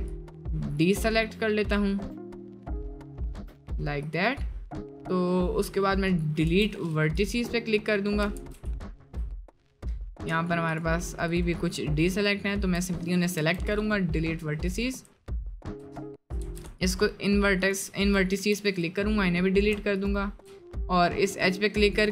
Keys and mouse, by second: 0.2 ctrl+click, 1.1 ctrl+click, 2.2 ctrl+click, 3.0 ctrl+click, 4.1 click, 4.5-5.5 middle drag, 5.7 middle click, 6.5 Delete, 8.4 ctrl+z, 8.8 shift+middle click, 9.4 middle click, 10.8 shift+click, 12.2 shift+click, 13.4 Delete, 14.8 click, 16.4 ctrl+z, 16.7 shift+click, 18.4 Delete, 20.0 alt+click, 21.3 middle click.